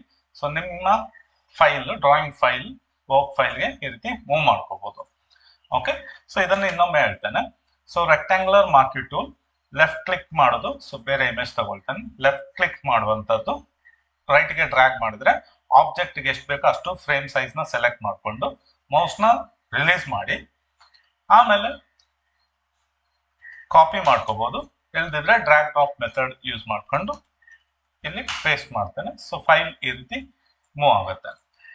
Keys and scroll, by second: 6.5 ctrl+d.